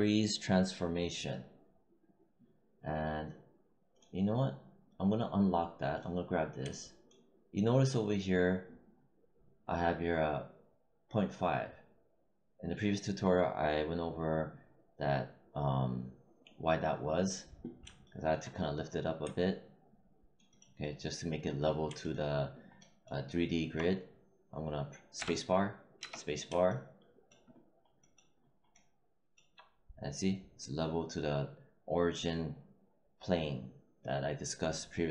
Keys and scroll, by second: 25.1 space.